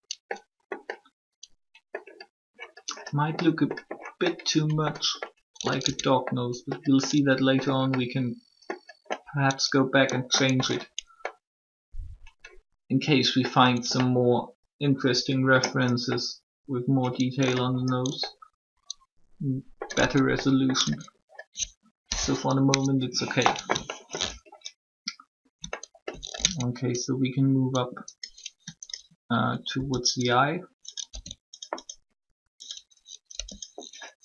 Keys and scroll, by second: 5.8 Tab, 13.8 Tab, 19.9 Tab, 20.8 Tab, 22.6 3, 26.4 alt+Tab, 29.6 shift+e, 31.1 s, 33.3 e.